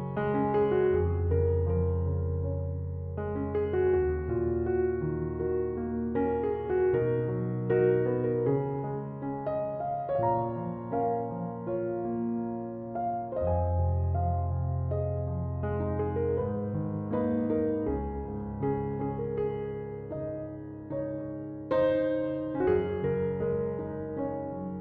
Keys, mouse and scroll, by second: 1.6-4.6 drag, 6.9-8.4 middle drag, 8.4 Tab, 8.7 scroll down 1, 9.0-12.0 middle drag, 13.4-14.3 scroll down 2, 14.3 KP_1, 15.2-17.2 shift+middle drag, 17.2 g.